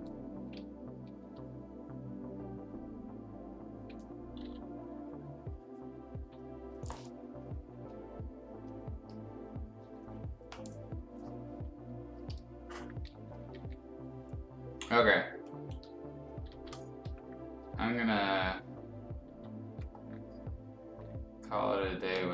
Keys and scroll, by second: 1.2 b, 4.4 e, 12.2 b, 13.4 ], 13.6 ], 15.3 space, 16.5 ctrl+shift+s, 17.0 Escape, 22.1 ctrl+shift+s.